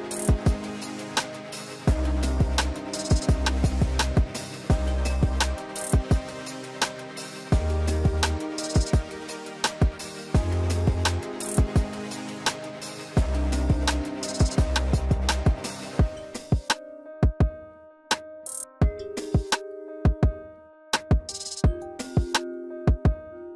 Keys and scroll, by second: 21.8 z.